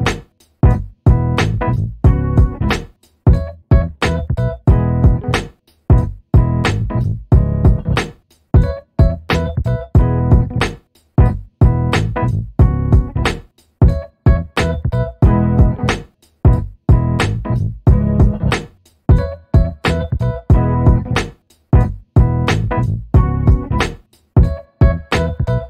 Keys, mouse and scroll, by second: 1.5 shift+click, 2.5 ctrl+shift+KP_Subtract, 5.0 ctrl+shift+k, 7.6 click, 8.5 click, 10.1 click, 11.7 click, 13.3 click, 14.2 KP_2, 14.4 KP_0, 14.6 KP_Enter, 17.8 shift+click, 20.6-23.8 drag, 24.6 click.